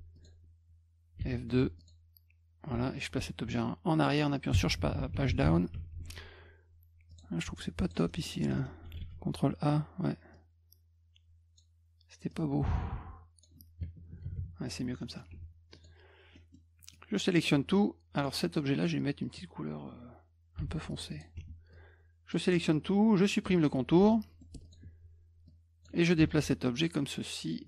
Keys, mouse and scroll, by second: 0.1 click, 1.2 d, 1.8 click, 5.7 F2, 7.1 click, 7.8 click, 8.1 middle click, 8.2 middle click, 8.4 middle click, 8.6 scroll up 2, 9.0 ctrl+a, 10.3-11.6 drag, 12.3-13.4 drag, 15.0 middle click, 15.3 F1, 15.7 click, 16.3 middle drag, 16.9 click, 18.2 click, 18.8 click, 20.6 d, 21.1 click, 21.7 click, 23.2 middle click, 24.1 middle click, 24.6 click, 25.5 click, 26.2-27.5 ctrl+drag.